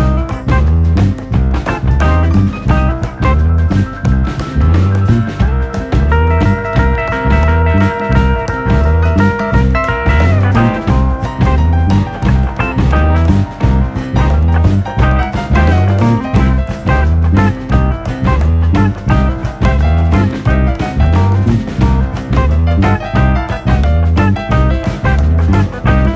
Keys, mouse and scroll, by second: 1.4 KP_3, 2.0 click, 2.5 scroll down 1, 2.7 middle click, 3.2 scroll up 3, 3.3-4.8 shift+middle drag, 5.3 KP_7, 5.7 alt+/, 5.8 scroll up 1, 6.0 shift+middle click, 6.3 click, 8.3 click, 8.7 l, 9.0 click, 10.0 KP_3, 10.5 shift+middle click, 11.0 shift+d, 11.7 r, 13.1 ctrl+z, 13.9 r, 15.0 scroll down 1, 15.2 shift+middle click, 15.6 g, 17.3 scroll down 2, 17.4 shift+middle click, 18.0 shift+d, 19.7 r, 20.5 g, 21.5 click, 22.2 l, 22.7 shift+d, 24.1 KP_7, 24.8 shift+middle click, 25.6 r.